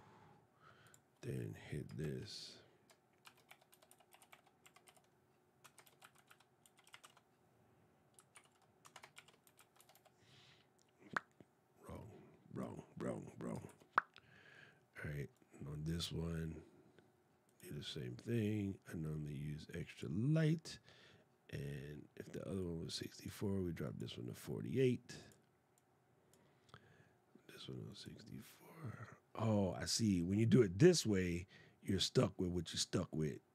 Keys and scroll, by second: 1.8 shift+Return, 3.0 shift+c, 5.6 shift+m, 8.1 alt+\, 8.9 shift+e, 13.4 shift+\.